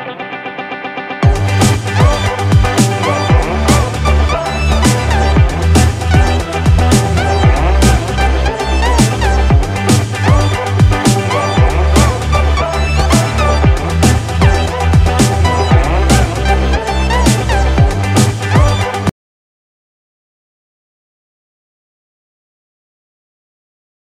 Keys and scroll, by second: 0.3 ctrl+=, 5.1 ctrl+-, 12.5 ctrl+0, 12.9 ctrl+=.